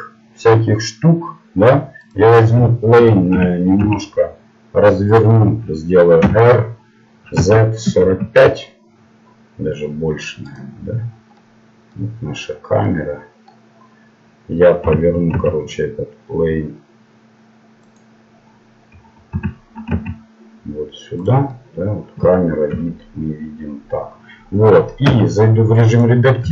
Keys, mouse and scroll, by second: 2.2-3.9 right drag, 3.3 r, 6.2 r, 10.9-12.0 middle drag, 14.0 middle click, 14.9 r, 19.3 r, 21.5 middle click, 22.7 KP_0, 25.1 Tab.